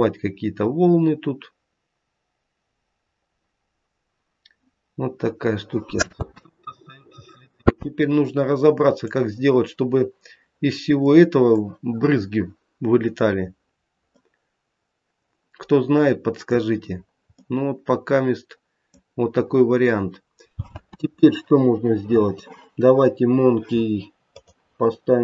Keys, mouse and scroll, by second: 6.1 space, 6.4 middle click, 16.8 scroll down 3, 17.3 middle click, 20.8 space, 24.3 click.